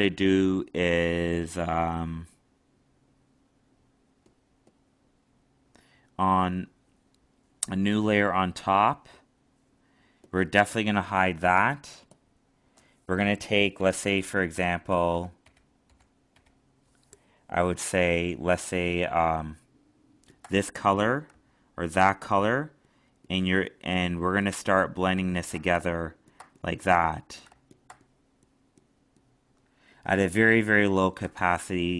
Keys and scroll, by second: 11.1 alt+space.